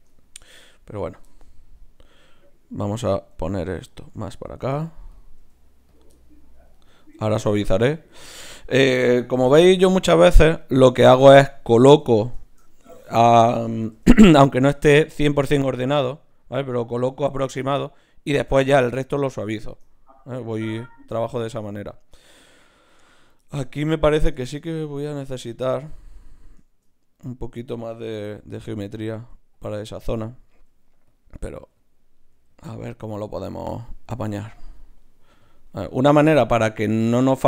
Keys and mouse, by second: 0.6 g, 3.4 g, 4.4 right click, 5.4 g, 5.9-7.8 drag, 6.1 right click, 6.7-7.8 right drag, 7.0 g, 7.8 g, 8.5 click, 8.5 right click, 9.5 KP_Decimal, 13.9 g, 14.7 g, 16.0 g, 16.8-18.5 drag, 16.9 g, 17.6 right click, 18.5-23.1 middle drag, 23.1-25.8 right drag, 25.5 click, 27.4 right click, 28.2 click, 28.2 g, 29.0-31.5 right drag, 29.1 g, 30.5 g, 31.5 g, 32.4 g, 33.0 g, 33.7-35.4 drag, 34.4 g, 35.2 g, 35.4 right click, 35.8 g, 37.1 g.